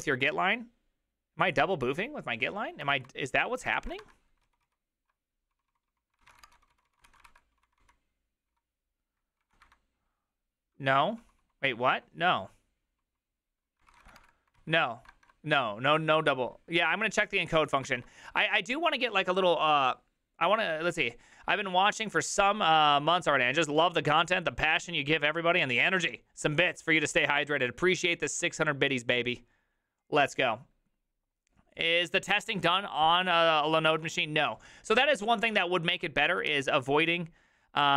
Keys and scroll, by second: 3.8 alt+{, 3.8 ctrl+a, 4.5 ctrl+u, 4.5 1, 4.7 ctrl+u, 5.5-11.9 typing, 13.0-14.7 typing, 17.5 alt+{, 35.2 alt+{, 35.2 ctrl+a, 35.4 ctrl+a, 36.2 ctrl+a, 36.5 ctrl+a.